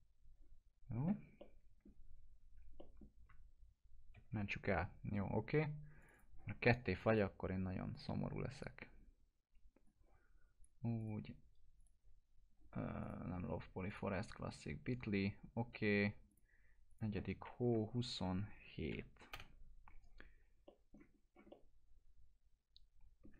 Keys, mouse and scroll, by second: 1.4-2.0 alt+middle click, 2.0 scroll down 1, 2.8 middle click, 4.2 ctrl+s, 6.0 click, 16.3 click, 17.7 Right, 18.1 BackSpace, 18.9 7, 19.3 Return, 20.7 middle click, 21.2 scroll up 1, 21.5-23.3 alt+middle drag.